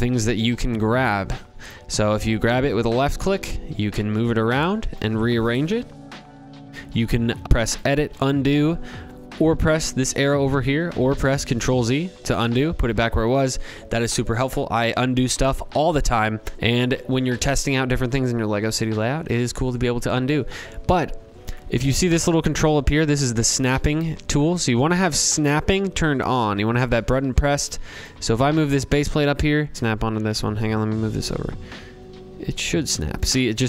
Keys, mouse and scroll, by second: 3.8 click, 6.7 click, 8.0 click, 10.7 click, 23.8 click, 29.7 click, 31.6 click, 32.1 click.